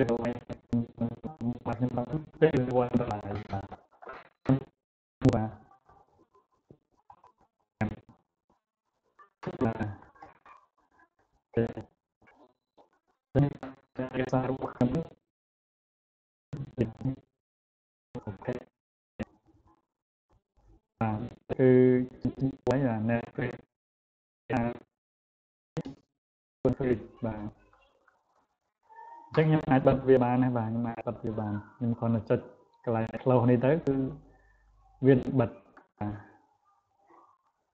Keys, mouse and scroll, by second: 29.5 click, 32.2-37.7 drag.